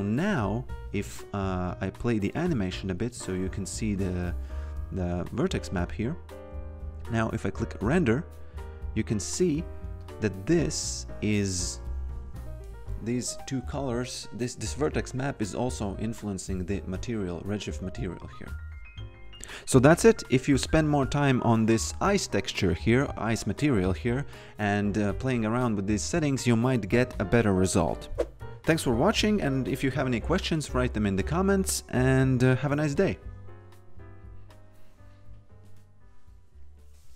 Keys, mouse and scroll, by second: 1.5 f, 5.1 f, 7.6 click, 10.0 click.